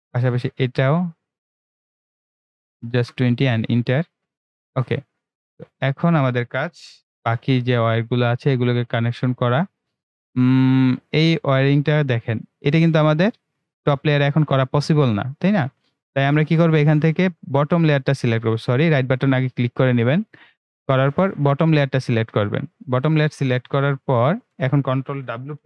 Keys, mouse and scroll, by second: 5.1-7.1 right drag, 7.1 ctrl+w, 13.2-18.5 right drag, 19.4-21.3 scroll up 1, 21.3 click, 23.5-25.6 right drag.